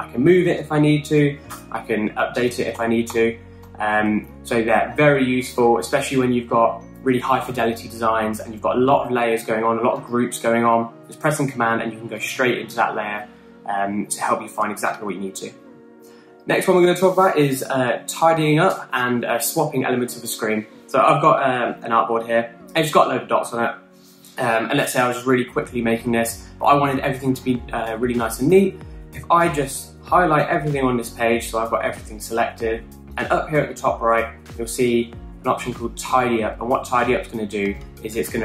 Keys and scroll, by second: 1.4 Right, 2.0 typing, 3.3 super+z, 3.6 super+z, 4.2 super+z.